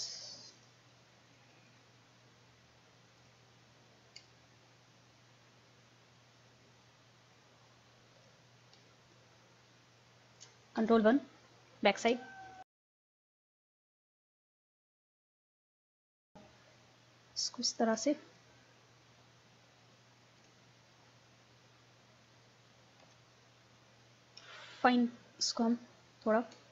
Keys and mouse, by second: 0.0-1.4 drag, 1.8-3.5 drag, 3.5 middle click, 4.3-7.2 drag, 8.9-10.7 drag, 11.1 ctrl+KP_1, 12.2-14.2 drag, 14.2 ctrl+z, 15.4-16.9 drag, 18.0 middle click, 18.4-20.9 drag, 20.9-22.5 middle drag, 23.0 KP_1, 24.0-25.4 drag.